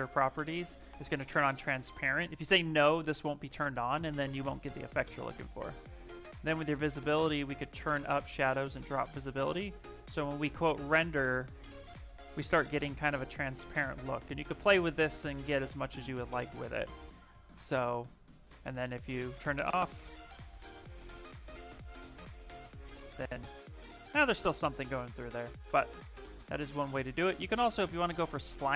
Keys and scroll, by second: 9.9 shift+r, 19.5 shift+r.